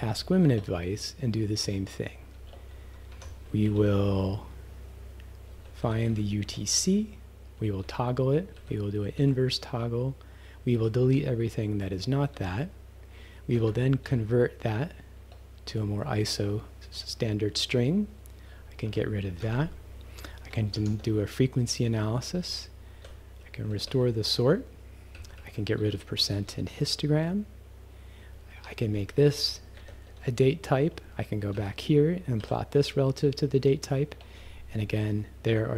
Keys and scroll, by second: 0.5 Return, 1.6 c, 3.1 Escape, 3.7 shift+c, 5.3-6.6 typing, 7.9 t, 8.6 g, 9.2 t, 10.8 g, 11.1 d, 12.4 q, 13.6 =, 14.1 Up, 15.2 Return, 18.9 Left, 19.4 -, 20.8 shift+f, 23.9 [, 25.2 Right, 25.8 -, 28.5 Left, 29.8 shift+@, 31.6 Right, 32.4 ..